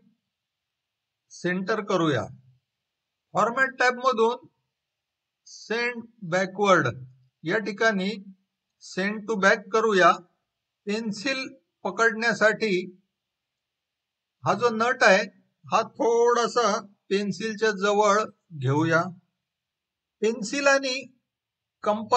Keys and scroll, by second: 18.7 Left.